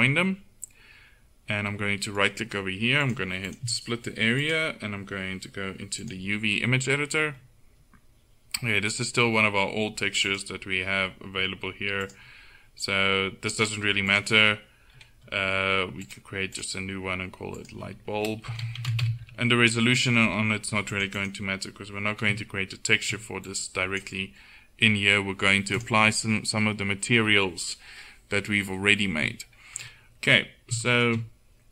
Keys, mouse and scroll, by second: 2.2-4.0 right drag, 4.4-6.2 drag, 6.9-9.6 middle drag, 10.3-12.2 drag, 13.6-15.3 drag, 15.3 middle click, 16.1-18.5 drag, 21.2-23.5 drag, 30.1 scroll down 1, 30.3-31.0 scroll up 1, 31.0 scroll down 1.